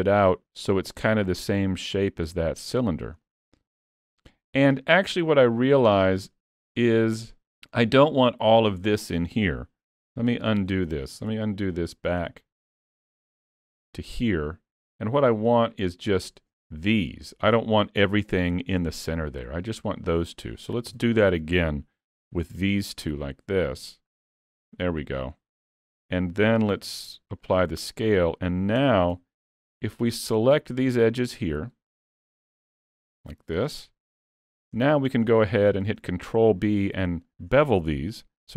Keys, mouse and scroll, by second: 2.9-3.3 scroll up 2, 3.3 middle click, 6.5-7.6 scroll up 1, 10.2 ctrl+z, 10.6 ctrl+z, 11.0 ctrl+z, 11.3 ctrl+z, 13.5 ctrl+z, 14.2 middle click, 15.5 shift+click, 16.1 shift+click, 16.6 middle click, 18.2 middle click, 19.1 middle click, 20.9 KP_3, 22.2 e, 24.5 middle click, 25.6 Tab, 25.9 middle click, 26.8 ctrl+a, 28.9 Tab, 29.2 2, 29.9 click, 30.5 middle click, 31.2 shift+click, 32.4 click, 33.2 shift+click, 33.9 middle click, 34.9 shift+middle click, 36.1 middle click, 37.3 middle click.